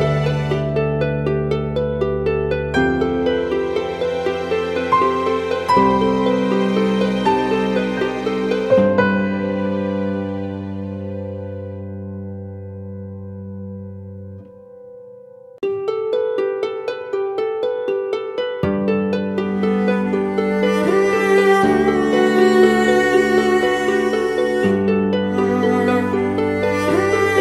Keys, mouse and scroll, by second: 0.4-0.9 typing, 6.5-8.3 typing, 21.0-22.1 typing.